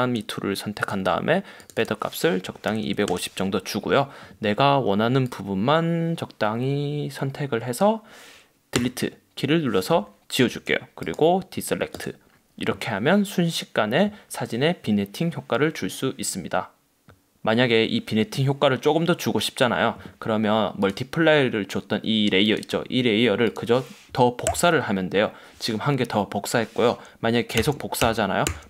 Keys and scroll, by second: 2.3-3.4 typing, 9.2 BackSpace, 24.6 super+j, 27.7 super+j.